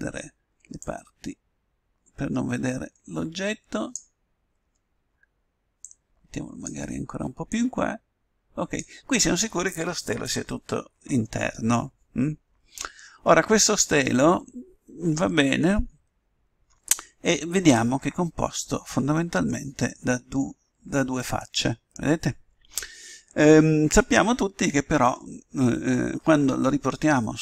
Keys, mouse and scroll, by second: 0.9-2.5 drag, 4.7-5.8 middle drag, 5.8-7.4 drag, 7.7-9.2 drag, 12.5-17.6 middle drag.